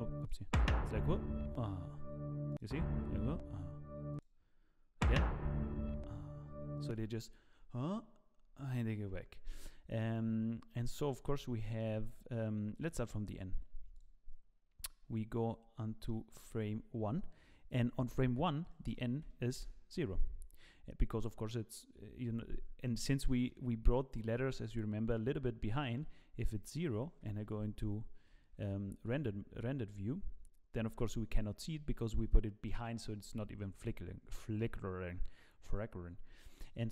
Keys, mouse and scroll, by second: 10.7 middle click, 11.3 scroll up 1, 11.6 shift+middle click, 12.7 click, 13.9 click, 15.0-15.7 scroll down 6, 15.7 middle click, 16.2-17.1 scroll up 8, 18.6 click, 22.6 scroll down 1, 22.8 middle click, 23.7-24.5 scroll up 1, 24.5 middle click, 24.5-25.1 scroll up 3, 25.7 middle click, 26.1-26.6 scroll down 3, 26.4 middle click, 27.2 KP_0, 28.6 z, 29.0 z, 30.0 z, 36.1 z, 36.5 middle click.